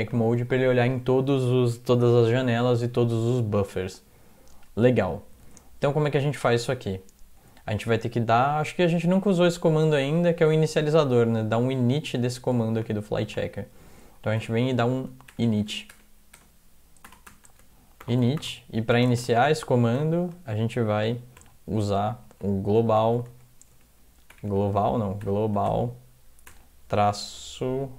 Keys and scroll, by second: 5.5 alt+Tab, 14.4 Return, 14.8-16.3 typing, 17.1 Return, 17.5-19.2 typing, 21.4 typing, 22.2 Left, 22.5-26.5 typing.